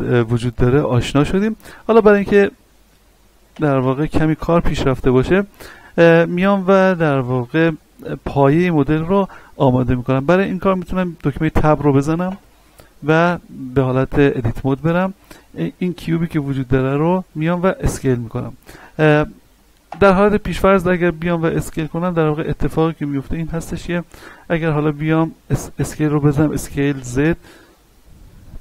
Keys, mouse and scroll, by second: 1.7 x, 2.2 click, 2.7 right click, 4.8-5.8 scroll down 1, 6.3 scroll up 1, 6.5-12.2 shift+middle drag, 12.2 Tab, 12.9 shift+middle click, 13.7 middle click, 14.5-15.3 scroll up 1, 18.3-18.8 scroll down 1, 19.8 Tab, 20.4-21.8 scroll down 1, 21.8 n, 22.7 scroll up 1, 25.8 s, 26.9 z.